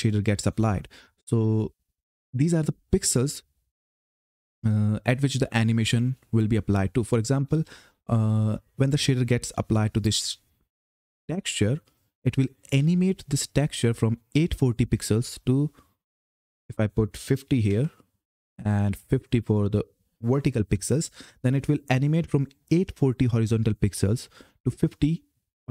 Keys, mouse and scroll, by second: 15.8 click, 18.7 click.